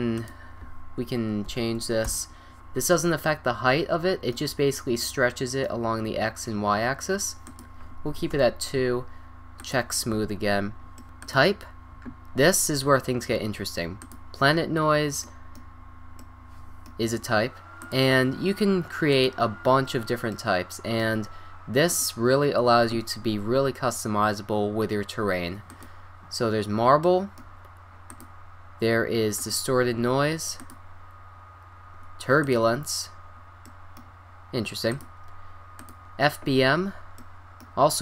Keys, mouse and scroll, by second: 0.2-2.0 drag, 4.4-5.2 middle drag, 5.3 middle click, 5.6 middle click, 5.7 click, 6.1 middle click, 6.2 click, 7.5-9.4 drag, 9.9-11.1 drag, 11.2-13.0 drag, 14.8-15.2 middle drag, 17.8-19.5 drag, 20.0 middle click, 20.1-20.5 drag, 21.9-23.7 drag, 26.7-27.4 middle drag, 28.1-30.1 drag, 30.6-32.8 drag, 33.1 middle click, 34.9-35.4 drag, 36.1 click, 36.9 middle drag.